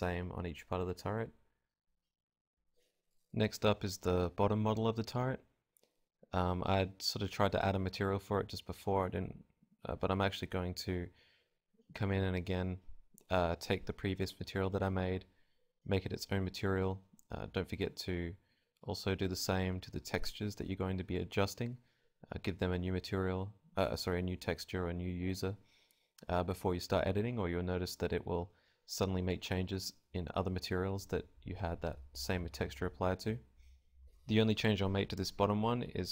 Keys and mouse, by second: 0.7 right click, 1.2-10.9 drag, 12.0 click, 14.4-15.9 drag, 15.9-18.6 right drag, 33.6-36.1 drag, 34.3-35.9 middle drag, 34.3-35.9 right drag.